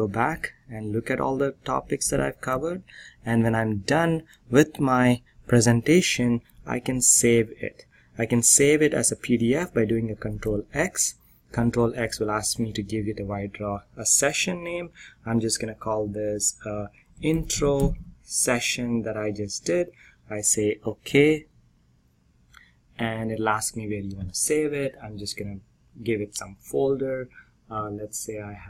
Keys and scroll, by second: 1.6 ctrl+f, 1.9 ctrl+p, 10.1 ctrl+x, 11.7 ctrl+r, 12.2 ctrl+p, 16.7-18.4 typing.